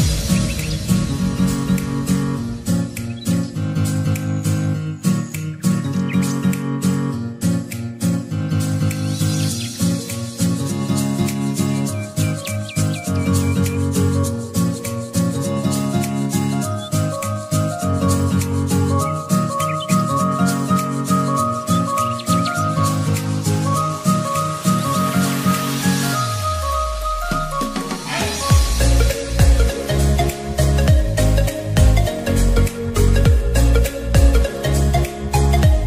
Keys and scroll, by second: 9.7 typing.